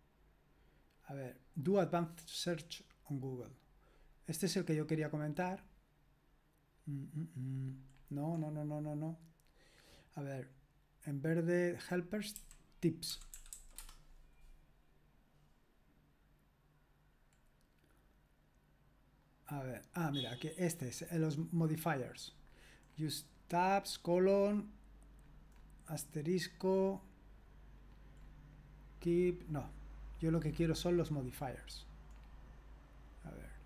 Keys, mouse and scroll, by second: 12.4 click, 12.4-14.0 typing, 25.4-26.5 scroll down 1, 26.5-27.9 scroll down 1, 27.9-32.2 scroll down 1, 32.2-33.4 scroll up 1, 33.4-33.6 scroll up 1.